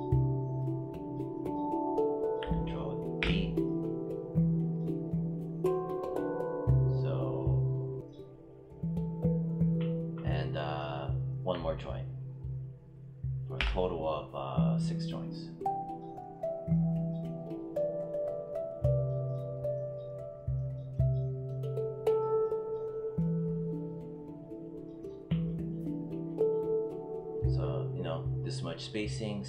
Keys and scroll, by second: 3.0 ctrl+d, 13.4 ctrl+d.